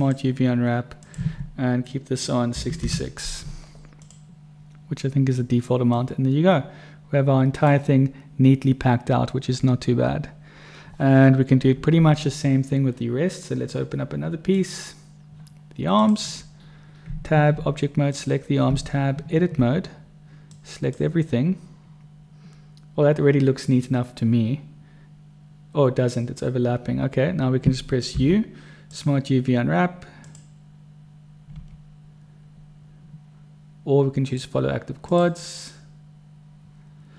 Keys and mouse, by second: 2.9 6, 6.4-8.0 drag, 9.5 middle click, 10.2-12.4 middle drag, 14.8 right click, 16.3 click, 17.4 Tab, 18.5 click, 18.9 Tab, 21.0 click, 28.5 u, 31.9 u.